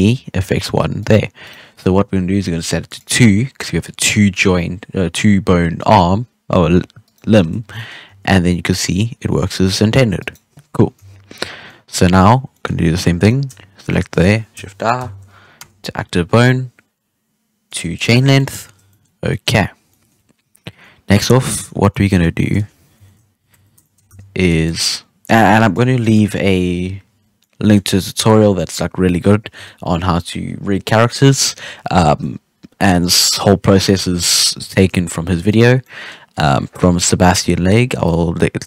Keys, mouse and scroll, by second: 1.4 right click, 2.8-7.0 drag, 7.0 right click, 7.7 middle click, 8.0 g, 10.9 KP_3, 11.5 scroll down 1, 11.6-11.9 middle drag, 11.9 scroll up 1, 12.0-13.1 middle drag, 13.1 right click, 13.8 shift+right click, 14.9 shift+i, 16.2-17.6 scroll down 1, 17.6 click, 18.2 scroll down 3, 18.3 middle drag, 18.6 alt+a, 18.7 scroll up 1, 18.8 middle click, 19.0 scroll down 2, 19.2 middle drag, 19.5 scroll up 1, 19.7 scroll down 4, 19.8-21.6 middle drag, 21.6 scroll up 2, 21.8 middle drag, 22.1 scroll down 1, 22.2 scroll up 1, 22.3-22.9 shift+middle drag, 22.9 KP_3, 23.5 Tab, 23.8 shift+middle drag, 23.9 scroll up 2, 24.0 z, 24.4 click, 25.5 click, 27.3-29.5 middle drag, 29.5 KP_3, 35.5 right click, 35.8-36.7 middle drag, 36.7 KP_3.